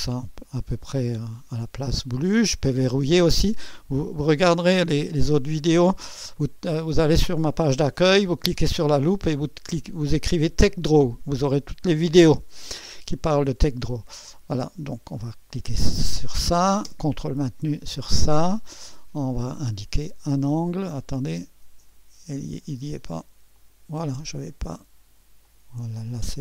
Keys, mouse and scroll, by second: 1.4 typing, 1.8-2.6 scroll up 1, 2.1-3.2 right drag, 3.4-4.3 drag, 4.9-6.6 drag, 6.8-7.8 scroll down 1, 6.9 click, 7.3 right click, 7.9 click, 8.6 right click, 9.0 click, 9.8-10.6 scroll up 1, 14.9 click, 17.6-18.5 ctrl+drag, 19.6 click, 20.9 click, 23.6 click, 24.5 drag, 25.5 click.